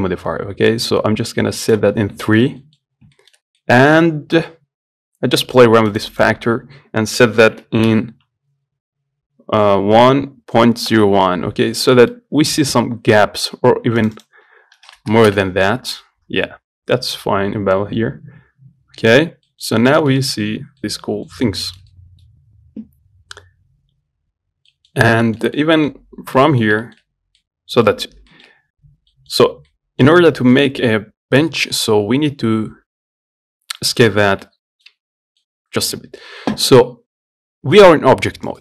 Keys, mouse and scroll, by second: 1.9 click, 2.5 shift+middle click, 3.1 scroll up 4, 3.4-6.1 shift+middle drag, 6.1-9.0 drag, 12.4-14.3 middle drag, 14.3-16.2 drag, 16.2 scroll down 2, 18.7-19.0 scroll down 1, 19.7 middle click, 20.0 scroll up 2, 20.2 shift+middle click, 20.8 scroll down 1, 21.1 middle click, 21.7 scroll up 2, 21.9 shift+middle click, 22.5-24.1 scroll up 1, 24.6 scroll down 3, 25.0 middle click, 25.2 scroll up 1, 25.5-27.3 shift+middle drag, 27.3-27.7 scroll up 1, 27.7-29.0 middle drag, 29.0-29.4 scroll down 1, 29.4 middle click, 29.6-29.9 scroll up 2, 29.9 middle click, 30.4 scroll up 1, 30.6-35.2 shift+middle drag, 35.2 Tab, 35.6 middle click, 36.2 Tab.